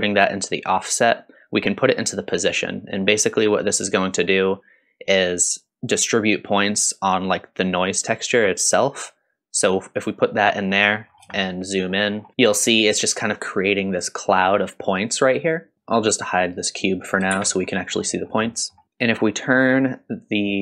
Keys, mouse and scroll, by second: 10.6-11.3 scroll up 2, 11.3-11.9 shift+middle drag, 12.1 scroll up 2, 15.7 click, 15.7 shift+z, 16.6 click, 17.3 shift+z, 17.7 middle click, 18.2 scroll down 1, 18.5 middle click, 20.0-20.6 drag.